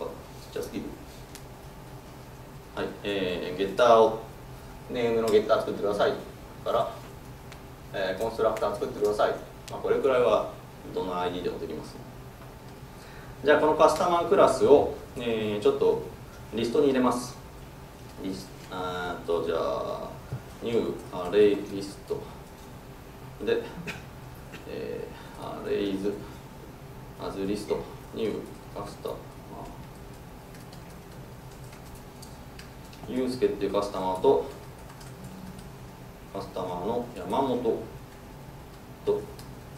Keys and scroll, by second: 0.9 alt+Return, 1.5 ctrl+n, 6.6 alt+Return, 7.3 ctrl+n, 22.7 Tab, 27.6 Tab, 36.0 Tab.